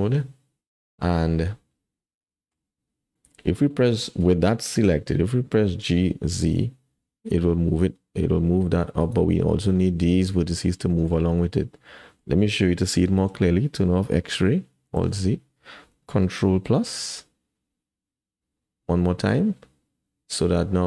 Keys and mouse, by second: 2.1 click, 3.2 click, 5.8 g, 9.8-11.1 middle drag, 11.8 middle click, 13.1 shift+click, 15.0 alt+z, 16.8 ctrl+KP_Add, 18.7 ctrl+KP_Add.